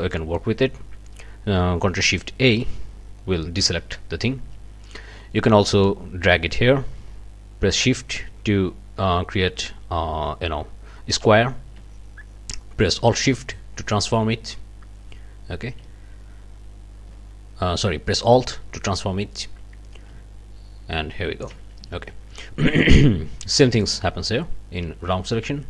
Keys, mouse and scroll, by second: 0.1 click, 2.4 ctrl+shift+a, 3.7 click, 5.8-21.6 drag, 21.9 ctrl+shift+z, 23.8 click.